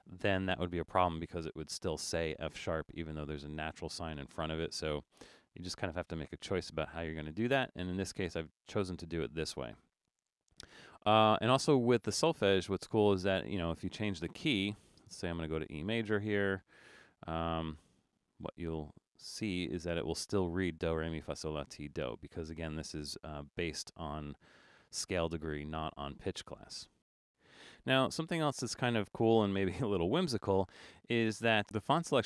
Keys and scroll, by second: 25.7 super+z.